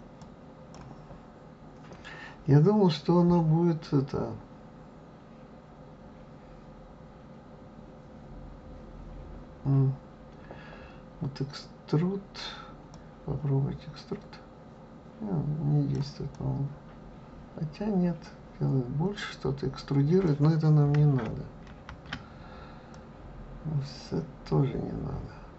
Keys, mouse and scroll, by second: 16.3-19.3 drag, 21.7 ctrl+z, 22.9-25.5 drag.